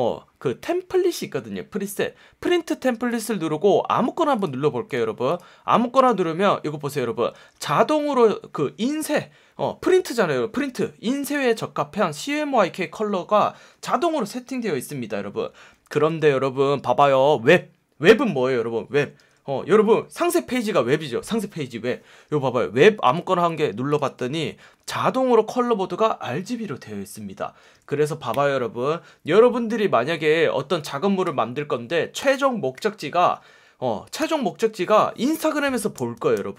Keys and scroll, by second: 6.7 F1, 7.3 F1, 15.9 F1, 17.0 F1, 19.1 F1, 24.6 F1, 27.5 F1.